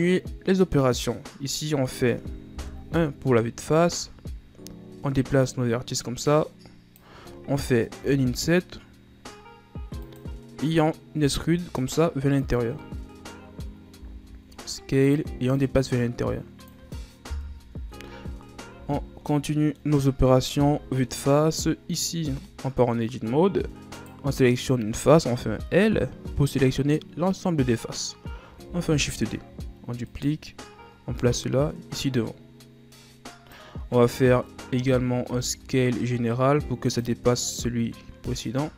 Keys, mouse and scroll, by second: 1.6 right click, 2.7 KP_1, 3.7-5.5 scroll up 7, 5.5-8.1 drag, 11.4 e, 12.9 scroll up 1, 13.0-14.1 middle drag, 14.1 s, 15.8-17.5 drag, 17.5 KP_1, 17.9 Tab, 18.9 a, 19.0-19.4 scroll down 2, 19.4-20.7 middle drag, 20.7 KP_1, 21.9-22.4 scroll up 2, 22.4 Tab, 24.1 right click, 25.5 l, 28.8 shift+d, 31.3-34.3 drag, 34.5-35.4 ctrl+scroll up 1, 35.4 s, 38.5-38.7 scroll down 2.